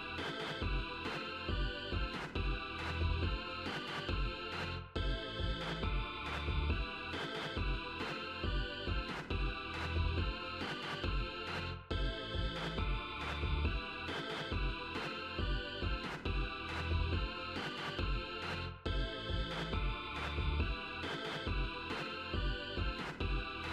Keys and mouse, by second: 0.1-2.5 drag, 3.3-7.0 drag, 8.8 click, 9.7 0, 11.5-15.0 drag, 16.0 click, 17.0 0, 19.2 click, 21.2 ctrl+z, 23.2 right click.